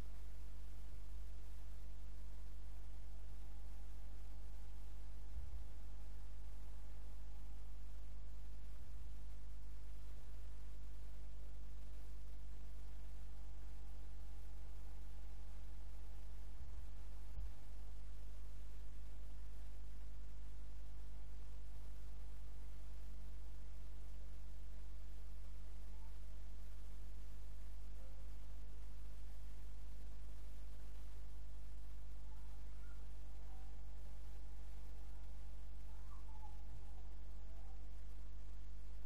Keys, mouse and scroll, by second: 5.3 KP_0, 8.9 g, 15.1 click, 16.6 g, 23.5 click, 27.2 click.